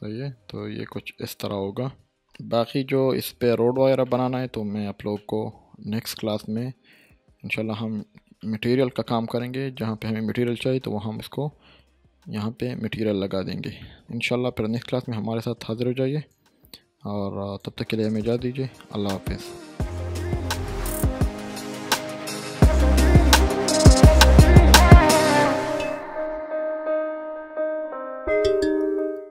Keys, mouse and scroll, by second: 0.1 Tab, 0.5 scroll down 1, 0.7-2.1 middle drag, 3.4 Tab, 4.0-4.6 shift+middle click, 4.7-5.1 scroll down 1, 5.1-7.3 middle drag, 8.4-9.0 shift+middle drag, 13.4 scroll down 1, 13.8-16.7 middle drag, 16.3 click.